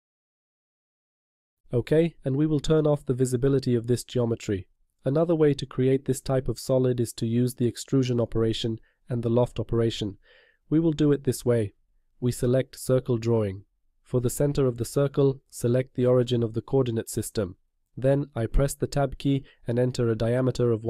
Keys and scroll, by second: 18.0 Tab, 19.8 0.